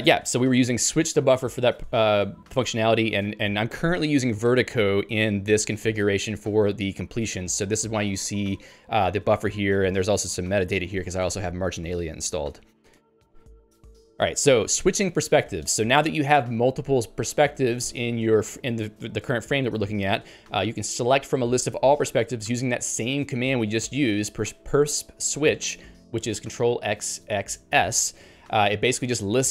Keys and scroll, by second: 3.3 ctrl+g, 12.9 ctrl+g.